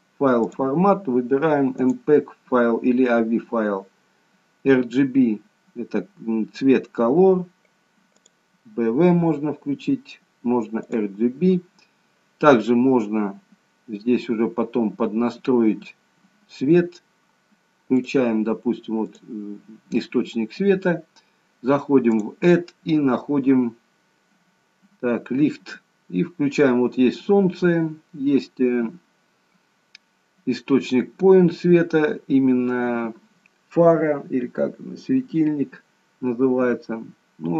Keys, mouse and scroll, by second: 0.5 click, 8.3 click, 11.0 click, 15.0-15.4 scroll up 1, 15.4-15.9 scroll down 1, 18.0 click, 19.0 click, 21.0-22.1 scroll down 2, 23.1 click.